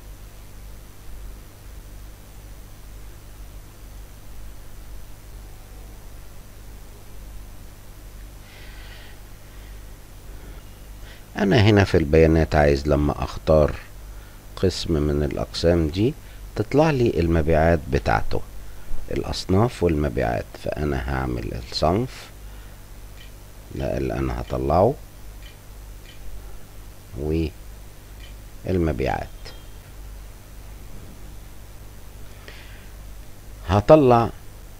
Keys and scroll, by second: 0.1 l, 0.7 j, 1.9 Return, 24.7 9, 26.3 l, 26.7 w, 28.1-30.7 typing.